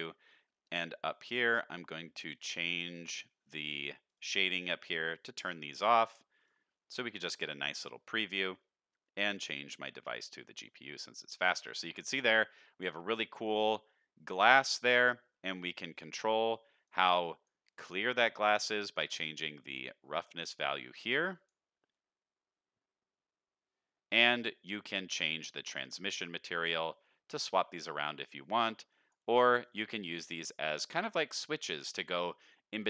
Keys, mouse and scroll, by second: 0.3-1.2 scroll down 7, 2.2 scroll down 2, 2.3 click, 3.2-4.1 scroll down 2, 4.1-6.3 drag, 4.1-4.4 scroll down 1, 6.3 click, 6.8-7.3 scroll up 2, 7.3 shift+middle click, 7.6-8.2 middle drag, 9.3-10.2 drag, 11.3 shift+middle click, 11.7 scroll up 2, 15.0 middle click, 15.9 click, 19.4 drag, 20.4 click, 24.9 middle click, 26.4 drag, 27.0-27.4 drag, 28.3 drag, 28.9 drag, 29.6 drag, 30.1 click, 30.8 middle click, 31.7 middle click.